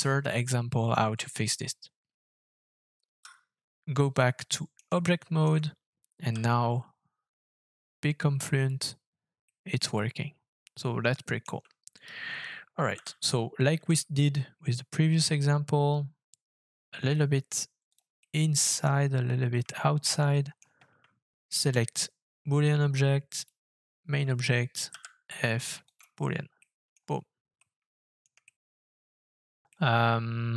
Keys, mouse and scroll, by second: 2.4 middle click, 2.9 Tab, 3.1 Tab, 4.1 middle click, 5.1 shift+middle click, 6.3 f, 9.4 middle click, 11.9 right click, 12.9 g, 13.7 z, 18.2 middle click, 19.7 shift+middle click, 23.4 shift+click, 24.9 f, 26.5 middle click, 26.9 scroll up 5, 27.6 middle click, 28.4 shift+middle click, 28.7-29.3 shift+scroll up 6, 29.7 middle click.